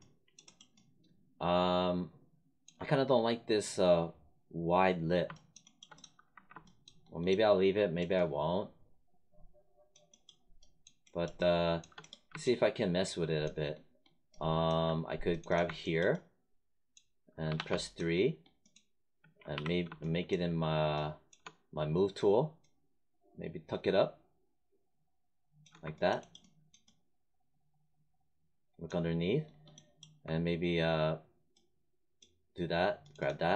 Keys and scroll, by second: 6.2 1, 17.4 3, 19.4 w.